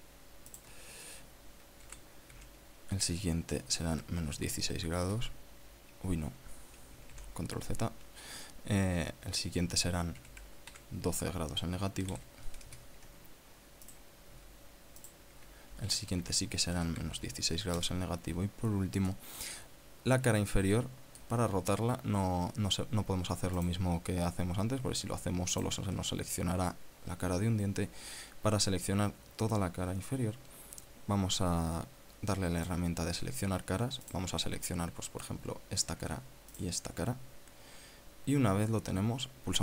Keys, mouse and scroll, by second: 1.3 alt+shift+right click, 2.6 r, 3.0 z, 4.5 KP_Subtract, 4.8 KP_1, 5.0 KP_6, 5.8 KP_Enter, 7.9 ctrl+z, 10.9 r, 11.5 z, 12.5 KP_Subtract, 12.8 KP_1, 12.9 KP_2, 13.4 KP_Enter, 14.6 right click, 15.7 alt+shift+right click, 16.6 r, 17.0 z, 17.5 KP_Subtract, 17.8 KP_1, 18.5 KP_Enter, 19.9 middle click, 21.5 middle click, 22.3-22.6 scroll up 1, 22.8 scroll down 1, 24.3 right click, 26.3 alt+shift+right click, 33.4 click, 34.1 scroll up 2, 34.8 right click, 35.2-36.2 middle drag, 36.3 scroll down 2, 37.3 shift+right click.